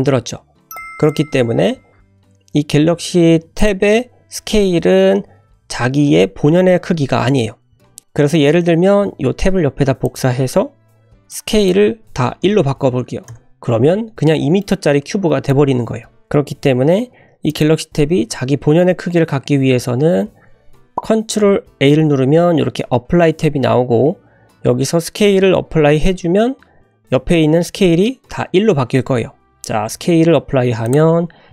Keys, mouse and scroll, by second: 1.1 click, 3.6 click, 8.0 click, 9.3 shift+d, 11.3-13.8 drag, 14.1 scroll down 1, 14.6-15.7 middle drag, 16.2 click, 16.7-17.5 scroll up 2, 17.5 click, 21.8 ctrl+a, 28.8 ctrl+a.